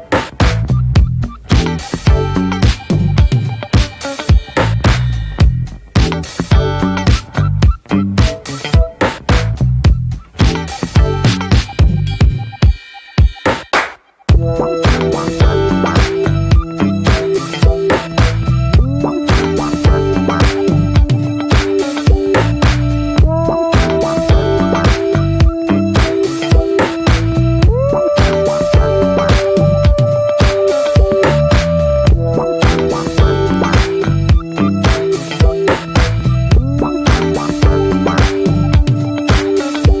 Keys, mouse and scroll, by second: 0.1 click, 0.3 scroll down 2, 0.5 shift+middle click, 1.3 ctrl+z, 1.9 ctrl+z, 2.2-2.5 scroll up 1, 2.5 shift+middle click, 3.0 ctrl+z, 3.9 click, 4.2 ctrl+z, 5.5 click, 6.3 ctrl+z, 6.4-7.5 scroll up 1, 7.5-9.1 drag, 9.1 ctrl+z, 10.2 click, 10.4 scroll down 1, 10.7 shift+middle click, 11.0 scroll down 1, 11.1 middle click, 12.0-13.0 scroll up 5, 12.2 shift+middle click, 12.6 shift+middle click, 13.0-14.1 shift+middle drag, 14.1 f, 16.0-17.3 drag, 17.4-20.2 drag, 20.2-20.5 scroll down 1, 21.0-22.5 drag, 22.5 middle click, 22.8 scroll down 1, 22.9 middle click, 23.1 f, 23.9 click, 24.4 middle click, 24.6 click, 25.3 middle click, 25.6-27.3 drag, 27.3 middle click, 28.0 click, 28.6 shift+middle click, 29.3 click, 30.4 click, 30.6 shift+middle click, 31.1 click, 31.8 middle click, 32.0 click, 32.2 middle click, 32.3 scroll up 1, 32.4-34.0 drag, 34.0-35.1 middle drag, 35.1 click, 35.6-36.1 middle drag, 36.1 click, 36.7 scroll up 1, 36.9 shift+middle click, 37.3 f, 38.0 middle click, 38.4 f, 38.9 middle click, 39.1 f, 39.6-40.0 drag.